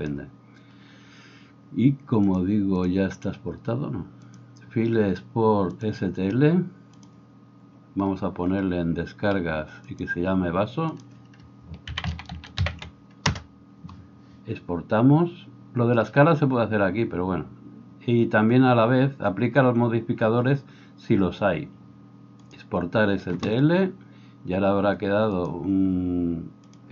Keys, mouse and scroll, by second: 0.0-26.9 drag.